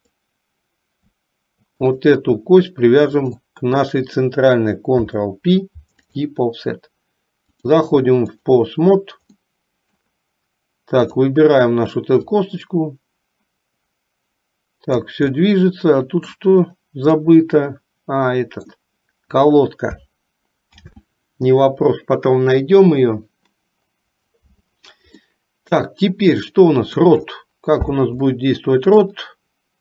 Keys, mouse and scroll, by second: 0.1 click, 2.0 click, 4.9 ctrl+p, 7.7-8.7 drag, 9.6 middle click, 12.4-15.3 drag, 15.5 middle click, 17.5-19.0 middle drag, 20.8 ctrl+z, 25.3-27.2 middle drag, 28.6 middle click.